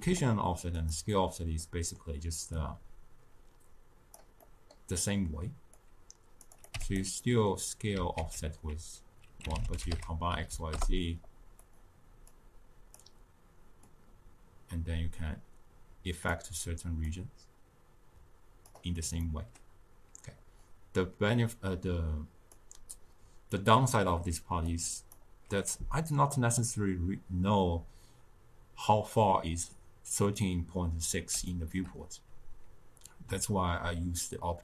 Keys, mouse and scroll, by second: 0.9 click, 4.1-10.7 drag, 10.7 ctrl+a, 13.0-19.2 drag, 19.2-20.7 middle drag, 20.7-31.5 drag, 31.5-34.6 shift+middle drag.